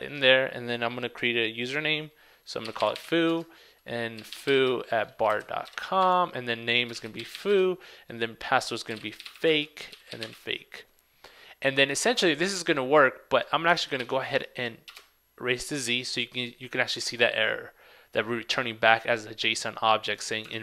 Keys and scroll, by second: 13.9 super+a, 14.1 super+c, 20.5 super+Tab.